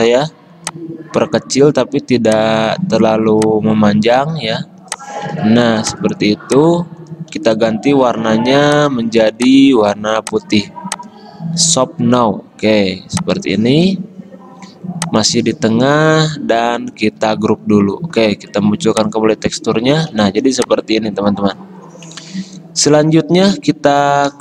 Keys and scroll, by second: 5.8 v, 7.5 d, 17.3 ctrl+g.